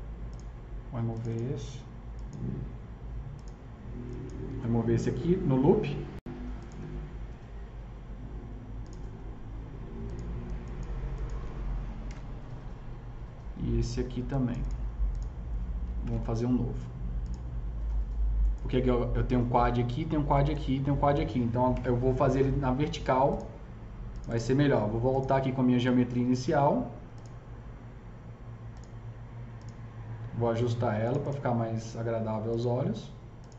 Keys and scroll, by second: 11.9 ctrl+BackSpace, 16.0 ctrl+BackSpace, 21.7 KP_0.